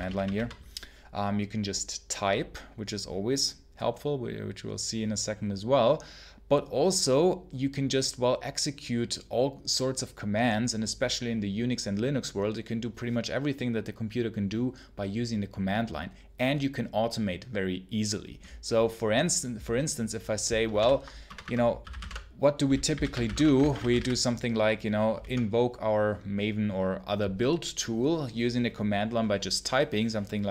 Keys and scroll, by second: 0.0-0.6 typing, 20.6 ctrl+l, 20.8 ctrl+i, 21.1 Return, 21.4-25.0 typing.